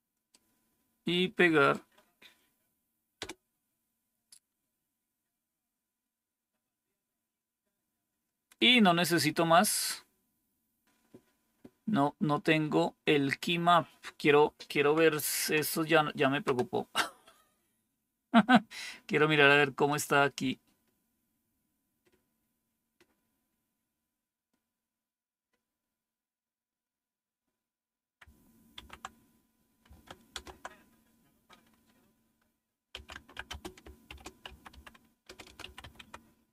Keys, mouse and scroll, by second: 0.2-1.6 right drag, 3.1 Return, 5.5-8.0 scroll down 1, 19.8-23.5 drag, 28.6 super+9, 30.2 super+Left, 32.6-36.5 typing.